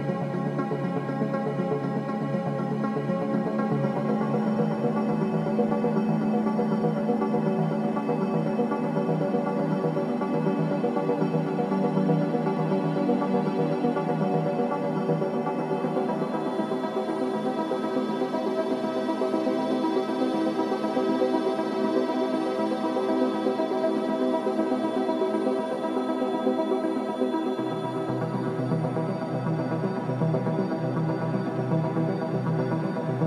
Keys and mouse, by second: 10.8 shift+middle click, 11.8-15.6 drag, 11.9 g, 17.9 ctrl+r, 20.8 click, 21.2 g, 23.6 ctrl+r, 31.8 ctrl+r.